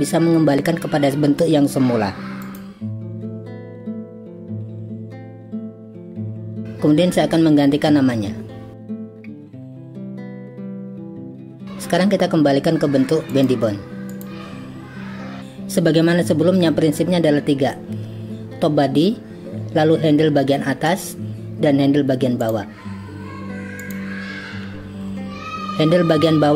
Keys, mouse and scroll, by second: 2.6 click, 3.0 drag, 3.7 click, 3.9 right click, 4.3 click, 4.6 click, 5.0 g, 5.8 click, 8.8 click, 9.0 shift+click, 10.0 click, 10.3-11.3 drag, 13.3-21.0 drag, 23.8 click.